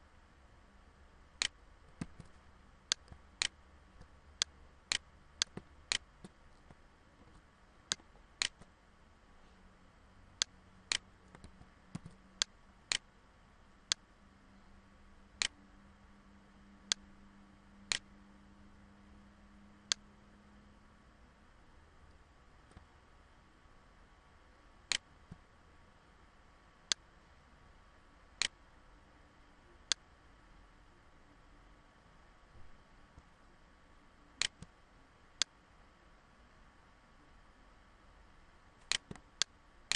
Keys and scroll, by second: 1.5 ctrl+z, 6.8 ctrl+=, 11.0 ctrl+z.